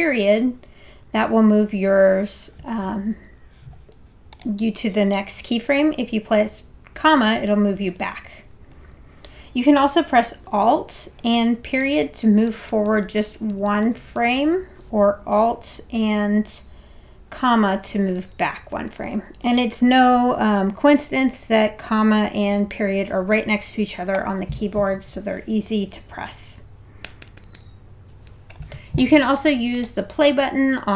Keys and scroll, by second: 1.0 ., 7.4 ,, 11.8 alt+., 17.7 alt+,, 27.0 alt+'.